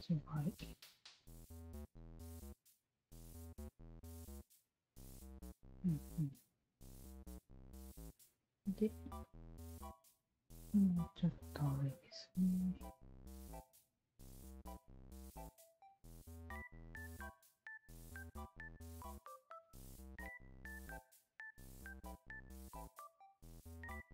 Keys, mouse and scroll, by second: 0.1 ctrl+z, 0.7-2.3 drag, 2.0 0, 2.9-7.6 alt+drag, 9.0 q, 9.2 alt+click, 10.6 w, 11.4-12.5 drag, 13.0 click, 13.9-15.4 drag, 15.7 click, 16.7 click, 18.3 alt+click, 18.9 alt+click, 19.7 alt+click, 20.4-23.1 alt+drag, 23.4 alt+click.